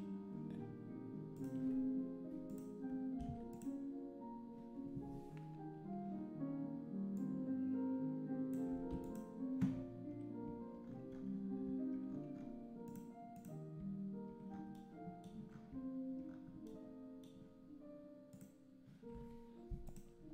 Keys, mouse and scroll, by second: 3.5 click, 7.2-8.9 drag, 8.9 x, 13.3 click, 18.4 click.